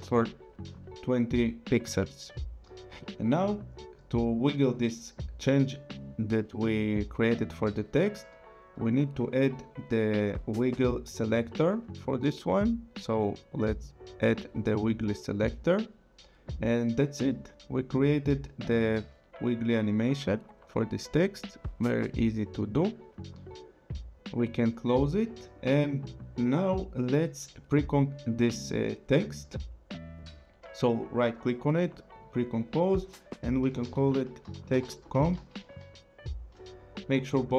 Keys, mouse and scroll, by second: 9.3 click, 14.4 click, 17.8 click, 24.4 click, 25.5 click, 27.2 click, 30.2 right click, 31.9 click, 33.6-36.7 typing.